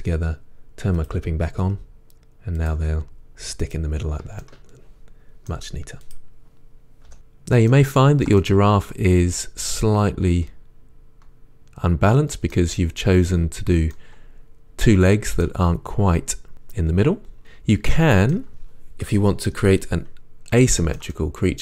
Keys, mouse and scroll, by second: 1.0-1.7 drag, 2.8 g, 4.4-4.9 middle drag, 7.1-12.5 middle drag, 14.0-17.4 middle drag, 20.9 middle click.